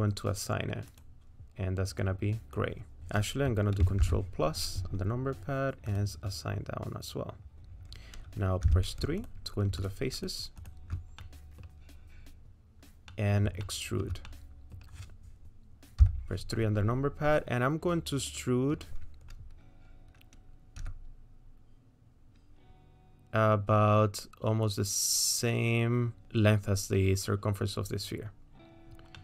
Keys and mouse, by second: 0.9 click, 4.0 ctrl+KP_Add, 5.9 click, 8.6 3, 9.8 shift+click, 10.1 shift+click, 10.6 shift+click, 11.2 middle click, 13.1 middle click, 13.6 shift+middle click, 14.2 middle click, 16.0 KP_3, 21.0 e, 29.1 middle click.